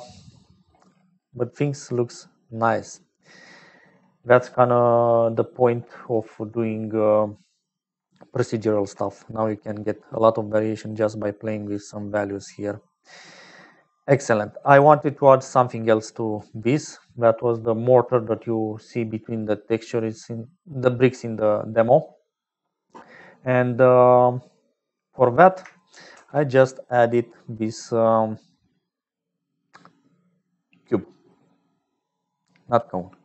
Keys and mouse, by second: 0.4 click, 1.7 click, 2.8 click, 8.4 shift+middle click, 10.9 click, 12.0-13.4 drag, 13.4 middle click, 14.5 middle click, 16.1 click, 16.7 middle click, 19.5 middle click, 24.9 click, 26.1 shift+a.